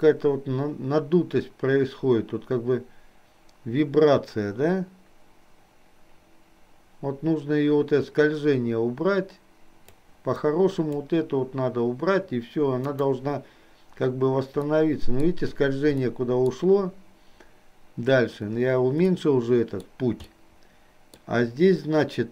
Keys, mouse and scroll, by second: 10.6 click, 13.0 click, 14.7 middle click, 16.1 middle click, 19.2 middle click, 20.5 middle click.